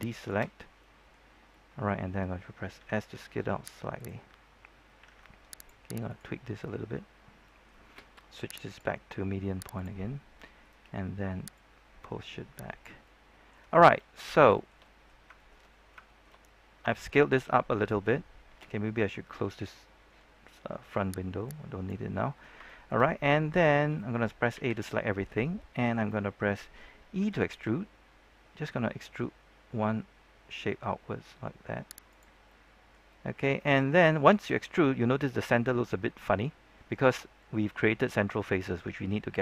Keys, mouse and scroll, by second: 0.1 shift+right click, 0.5 scroll down 1, 0.7-2.6 middle drag, 3.9 click, 3.9 s, 5.5 ctrl+Tab, 5.5 click, 6.0 right click, 7.1-7.4 scroll up 1, 7.4 middle click, 8.6-12.8 drag, 13.0 middle click, 13.7 shift+middle click, 14.5 shift+middle click, 15.3 shift+middle click, 16.0 shift+middle click, 21.4 click, 22.2 scroll down 1, 22.6 shift+middle click, 24.5 typing, 25.0 middle click, 27.1 typing, 32.0 click, 32.4 middle click, 34.9-35.6 scroll up 1, 35.6-37.1 middle drag.